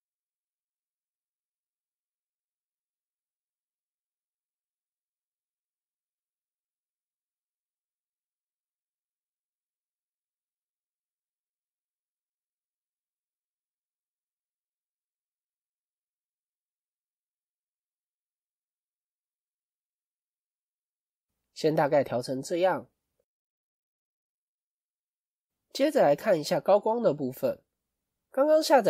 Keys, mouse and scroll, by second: 5.7 middle click, 9.2 scroll up 2, 20.6-20.9 scroll up 2, 20.9-21.7 scroll down 4.